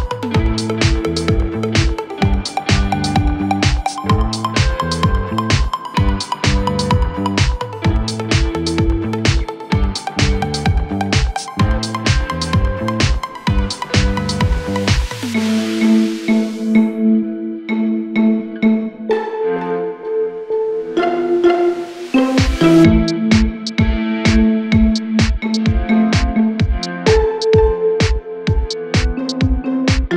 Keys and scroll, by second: 25.8 F3.